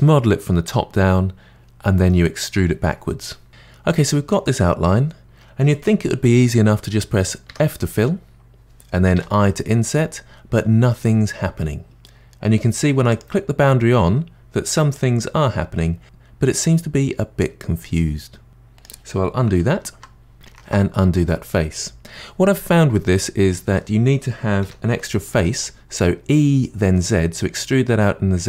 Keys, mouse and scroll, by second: 7.5 f, 9.1 i, 13.1 click, 14.9-16.8 drag, 19.6 ctrl+z, 20.5 ctrl+z, 22.1 ctrl+z, 23.0-24.7 middle drag, 24.7 e.